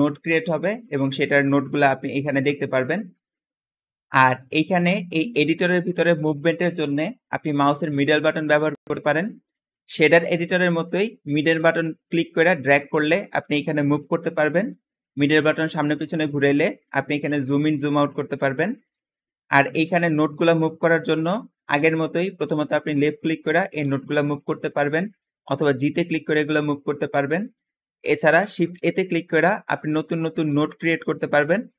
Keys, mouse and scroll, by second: 0.5 click, 1.7 click, 2.3 click, 3.5 Escape, 3.6 click, 4.5-5.3 scroll down 1, 4.9 middle click, 5.8-6.5 middle drag, 5.8-6.2 scroll up 1, 6.2-6.5 scroll down 1, 9.3-9.7 middle drag, 9.9-10.5 scroll up 1, 10.5-11.3 scroll down 1, 11.3 scroll down 1, 11.4 middle click, 12.1 middle click, 13.0 middle click, 13.6 middle click, 15.5-16.3 scroll down 1, 16.3-16.6 scroll up 1, 16.6-17.2 scroll down 1, 17.2-17.5 scroll up 1, 17.5-18.2 scroll down 1, 18.2 scroll up 1, 18.5-19.0 scroll down 1, 19.7 g, 20.3 click, 20.7-21.5 middle drag, 22.6-23.4 drag, 23.6-24.1 drag, 24.4-25.1 scroll down 1, 25.1-25.8 scroll up 1, 25.4 g, 26.4 drag, 26.9-27.7 scroll down 1, 28.3 shift+a, 29.2 click, 30.3 shift+a, 31.6 click.